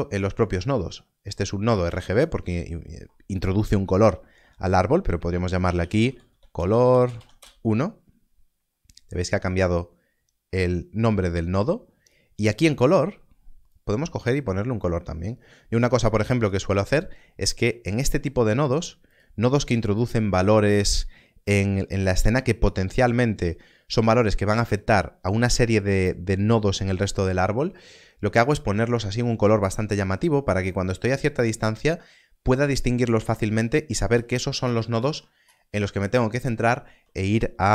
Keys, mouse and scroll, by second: 0.5 click, 0.7 scroll up 1, 3.8-5.2 scroll up 1, 5.4-7.0 typing, 7.3 Return, 12.7 Return, 17.4 scroll down 1, 19.1 click, 22.2 scroll down 1, 22.9 click, 27.8 scroll down 1, 33.4-34.3 scroll down 1, 34.8 scroll up 1.